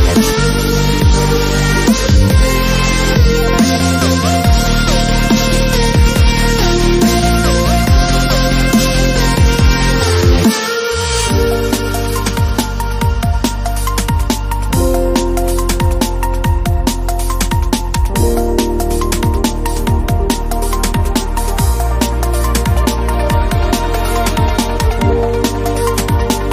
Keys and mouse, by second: 0.0-0.7 typing, 0.5 middle click, 1.8 middle click, 2.5 middle click, 2.7 middle click, 2.9 middle click, 4.2 ctrl+Tab, 5.3 middle click, 6.2 click, 6.4 ctrl+e, 6.8 ctrl+Tab, 7.3 ctrl+l, 7.5 click, 7.7 u, 8.1 g, 8.8 ctrl+Tab, 10.1 ctrl+e, 10.7 ctrl+Tab, 11.1 ctrl+l, 11.7 u, 12.0 g, 13.1 a, 14.9 middle click, 18.9-20.5 middle drag, 20.9 middle click, 20.9 a, 21.5 middle click, 22.7 a, 25.1 middle click, 25.3 ctrl+l, 25.5-25.9 middle drag, 25.5-26.5 typing, 25.9 click.